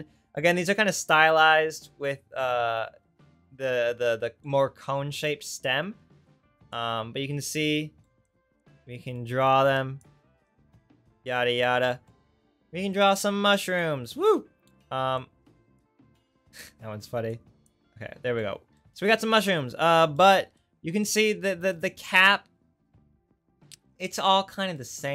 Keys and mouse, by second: 17.0 ctrl+z, 17.8 ctrl+z.